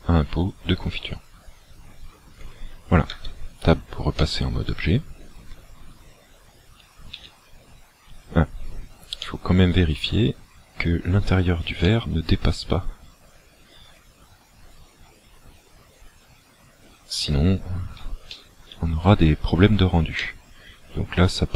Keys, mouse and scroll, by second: 3.2 Tab, 4.2 middle click, 7.2 z, 9.2 middle click, 11.9 middle click, 18.3 shift+middle click, 19.1 scroll up 3, 20.3 shift+middle click.